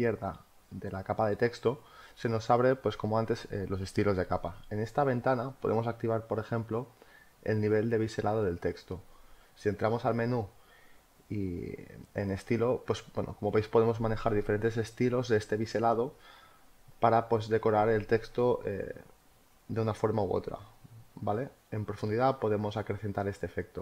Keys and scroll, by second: 3.1 space.